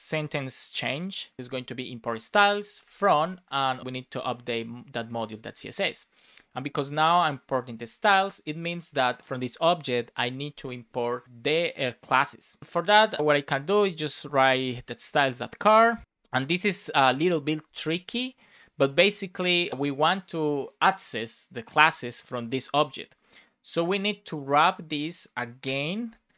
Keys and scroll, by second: 1.4 space, 2.2 Right, 3.1 space, 3.5 super+Right, 3.6 Left, 5.5 super+s, 8.1 super+c, 13.7 BackSpace, 14.2 super+v, 15.4 Right, 16.0 BackSpace, 26.1 super+v.